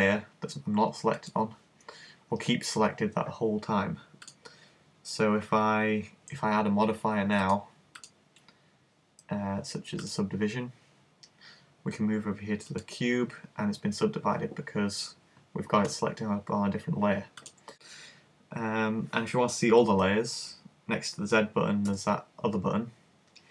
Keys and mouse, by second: 1.2 click, 4.3 click, 7.4 click, 12.7 click, 17.4 click.